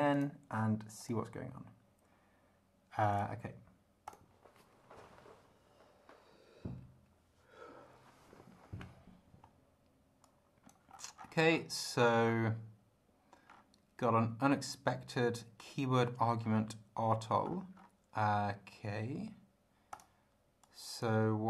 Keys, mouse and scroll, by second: 0.1 click, 1.0 click, 3.1 click, 4.0 click, 10.3 click, 11.3-12.2 scroll down 5, 13.5-13.8 scroll up 2, 16.3 scroll up 2, 17.4-18.4 scroll up 5, 19.9 click, 20.6 click.